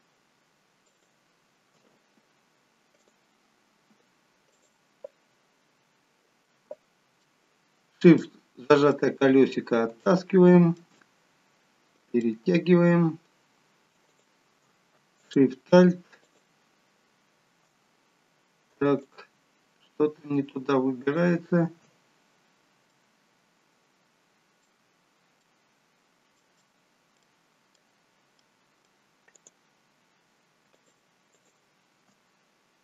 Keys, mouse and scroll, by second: 3.0 alt+shift+click, 5.5-6.2 scroll down 4, 7.3 shift+middle click, 8.2 middle click, 9.2-9.6 scroll up 3, 10.0 shift+middle click, 10.0 scroll up 2, 10.9 middle click, 12.2 middle click, 12.4 shift+middle click, 14.0 click, 15.2 alt+shift+click, 18.0-19.0 scroll down 1, 19.0 click, 21.0 alt+shift+click, 21.9 scroll down 1, 22.9 middle click, 24.9-25.4 scroll up 1, 25.4 middle click, 26.6 middle click, 28.4 middle click, 29.3 click, 30.7 alt+shift+click, 31.3 alt+shift+click.